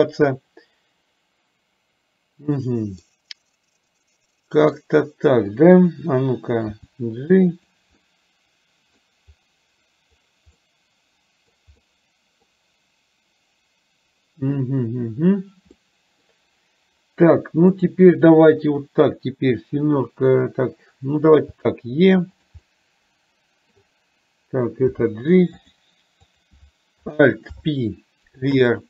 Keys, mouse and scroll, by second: 3.0-4.8 middle drag, 5.5 click, 6.7 g, 8.2 middle click, 10.8 middle click, 11.9 middle click, 15.9 middle click, 17.8 click, 21.5 e, 22.8-23.9 middle drag, 25.0 g, 27.5 alt+p.